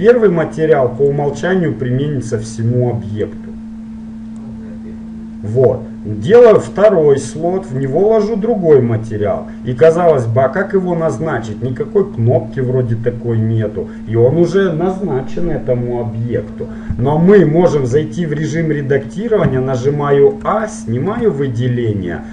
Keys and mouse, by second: 1.2-3.7 drag, 6.6-9.9 drag, 10.6-14.4 middle drag, 17.8 Tab, 18.8-22.3 middle drag, 19.5 a.